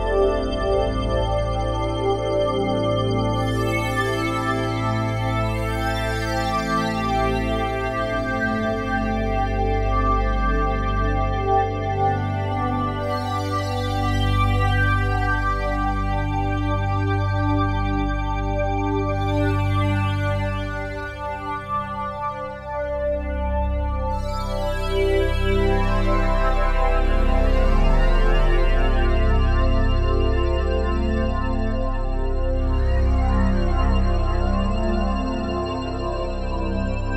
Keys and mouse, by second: 0.0-1.0 drag, 1.4 click, 2.3 ctrl+alt+click, 2.7 alt+shift+click, 3.3-4.7 drag, 4.7 g, 6.5 Escape, 7.1-11.8 ctrl+alt+drag, 12.7-13.2 drag, 14.7-16.7 drag, 17.8 click, 18.0 click, 19.0-22.5 typing, 23.3 click, 24.6 click, 24.6 typing, 24.7 click, 25.6-27.4 typing, 28.7-29.5 typing, 30.1 click, 31.5-33.7 ctrl+alt+drag, 31.5 typing, 33.7-37.1 typing, 35.5-37.1 drag.